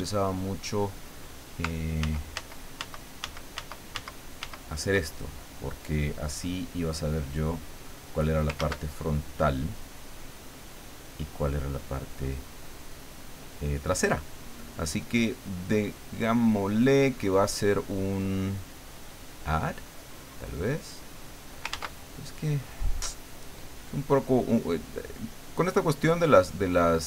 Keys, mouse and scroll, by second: 1.0 click, 2.0 ctrl+z, 6.3-8.0 drag, 8.6 ctrl+z, 9.4-11.4 middle drag, 15.0-19.6 drag, 20.0 click, 21.7 ctrl+z, 26.7 click.